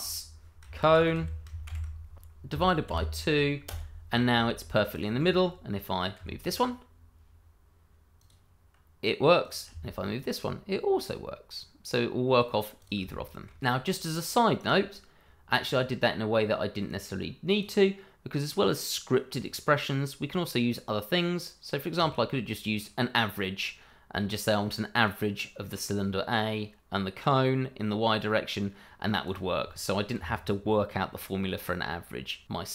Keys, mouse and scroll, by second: 0.8-2.8 typing, 3.6 Return, 4.9 click, 6.1 g, 8.2 click, 9.7 g, 12.8 click, 13.1 shift+middle click, 13.6 click, 14.5 right click, 15.6 click, 21.9 click, 29.2 click, 30.1 g, 32.4 click.